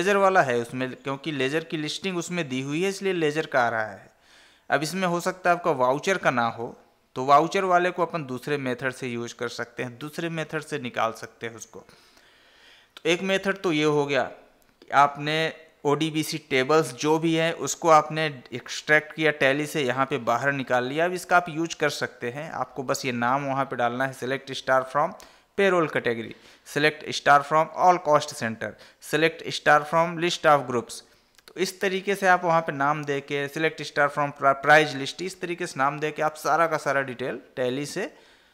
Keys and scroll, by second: 7.0 Down, 20.5 Down.